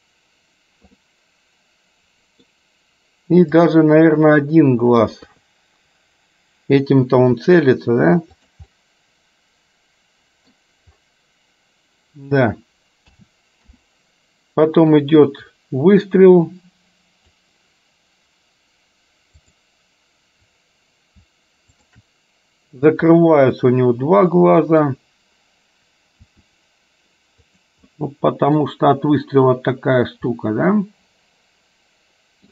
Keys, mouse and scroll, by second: 1.1-2.6 middle drag, 3.7 click, 4.5 middle click, 5.4 KP_3, 7.4 r, 8.9-10.6 middle drag, 13.2 a, 13.9 i, 15.1-17.6 drag, 21.9 shift+click, 23.4-25.0 middle drag, 26.4 r, 28.2 middle click, 30.7-32.5 middle drag.